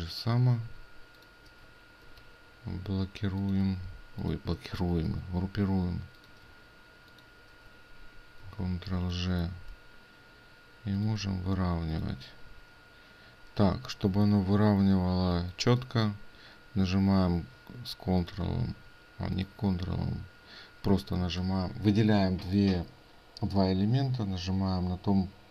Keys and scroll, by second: 5.1 ctrl+g.